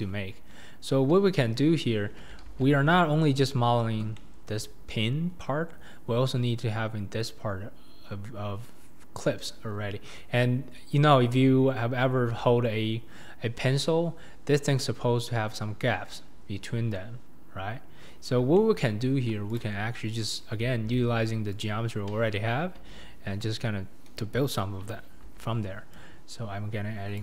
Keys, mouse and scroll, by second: 0.3-2.3 scroll up 7, 2.5 alt+z, 4.1-4.6 shift+middle drag, 4.6-8.9 scroll down 2, 8.9-12.0 scroll down 1, 12.0-12.4 scroll down 2, 12.4-12.8 shift+middle drag, 12.8-13.9 scroll up 4, 13.9 scroll up 1, 18.1-19.6 scroll down 7, 18.6-19.0 shift+middle drag, 19.6 click, 20.7 alt+z, 21.1-21.6 scroll up 2, 21.6 Left, 22.0-22.9 scroll up 3, 22.9 Tab, 25.2 ctrl+r.